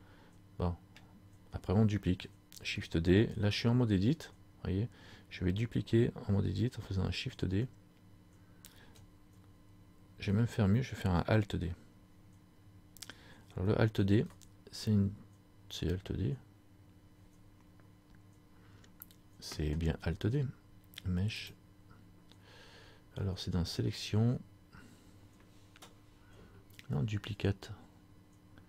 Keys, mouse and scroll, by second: 14.1 alt+d, 21.6 click, 23.0 click.